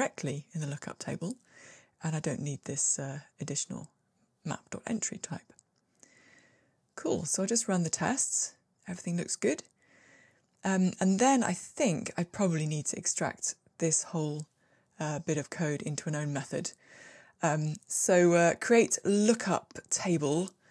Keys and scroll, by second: 2.2 super+x, 3.4 ctrl+r, 15.9 alt+super+m.